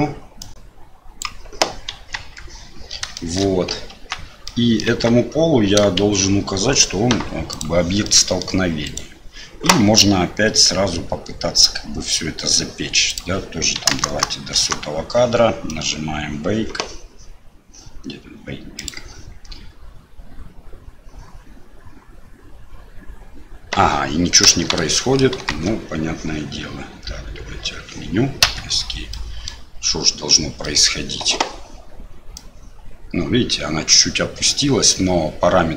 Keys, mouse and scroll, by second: 0.4-1.9 drag, 1.9 KP_1, 2.1 KP_3, 3.3 shift+middle click, 3.9 Tab, 4.4 middle click, 4.9 Tab, 6.0 shift+z, 8.0 middle click, 8.8 click, 13.2-15.1 drag, 14.0 KP_0, 18.7-28.9 drag, 29.1 middle click, 30.6 middle click, 32.3-35.7 drag.